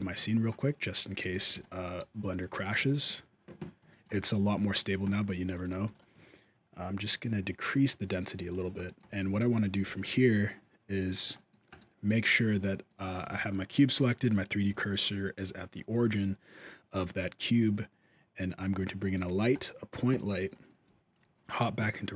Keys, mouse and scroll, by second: 0.0 shift+middle click, 1.0 alt+a, 1.3 b, 1.8 g, 2.3 alt+a, 2.6 shift+middle click, 3.7 shift+middle click, 5.3 click, 5.5 g, 6.2 shift+click, 8.6 middle click, 9.2 alt+a, 9.2 z, 9.6 alt+a, 10.9 click, 11.1 middle click, 11.5 right click, 11.9 middle click, 12.7 middle click, 13.1 shift+s, 14.6 shift+middle click, 15.7 shift+a, 20.0 middle click, 20.0-20.6 scroll up 1, 20.6 z, 21.7-22.1 scroll down 2, 22.0 middle click.